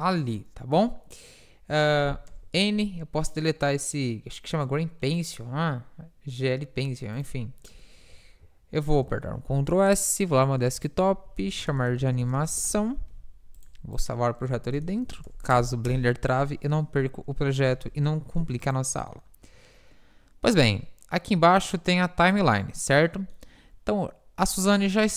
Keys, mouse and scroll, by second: 2.3 n, 16.1 Return, 17.7 n, 18.5 ctrl+s, 21.7-22.8 drag, 22.8-24.9 middle drag, 24.9 KP_7.